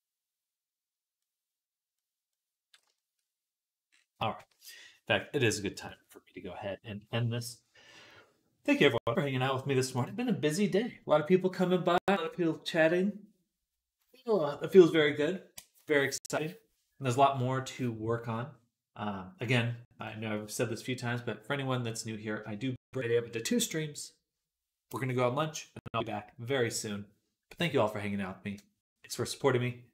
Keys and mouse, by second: 2.9 shift+right click, 3.8-29.9 right drag, 4.4 ctrl+s, 5.6 click.